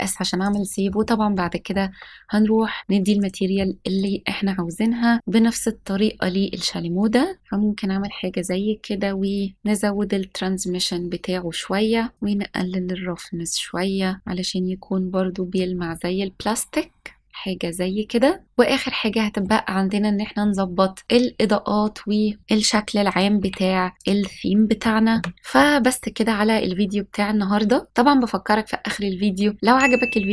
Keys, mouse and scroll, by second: 0.4 click, 1.3-1.7 shift+middle drag, 3.1 click, 3.9 click, 5.4 s, 7.4-7.9 scroll down 6, 9.5-15.5 drag, 9.5 scroll down 2, 15.8-17.2 middle drag, 17.2 scroll up 1, 18.4-19.4 middle drag, 18.4 scroll down 4, 21.0 click, 23.0 click, 23.3 s, 23.9 click, 24.2-24.8 middle drag, 25.0 KP_0, 29.6 click, 29.7-30.3 typing, 29.8 middle click, 29.8 scroll down 1, 30.0 click, 30.2-30.3 scroll up 3.